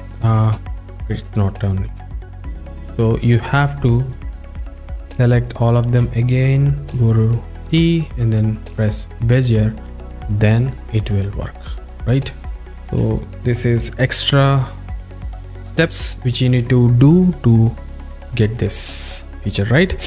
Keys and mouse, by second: 0.5 v, 2.1 v, 2.9 v, 4.9 click, 7.8 t, 10.0 click, 11.5 drag, 12.4 click, 16.4 v.